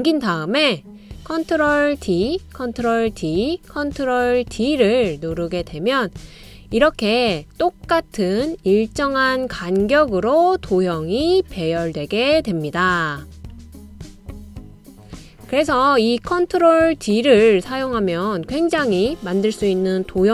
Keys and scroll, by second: 1.1 ctrl+d, 1.9 ctrl+d, 2.6 super+d, 3.6 super+d, 4.3 super+d.